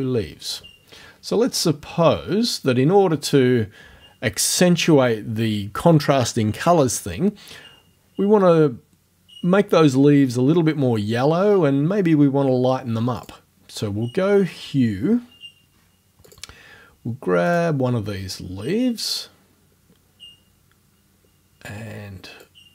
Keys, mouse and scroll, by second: 0.0-0.2 typing, 1.9-2.3 scroll down 1, 13.2 click, 16.3 click, 17.5 click, 22.4-22.7 drag.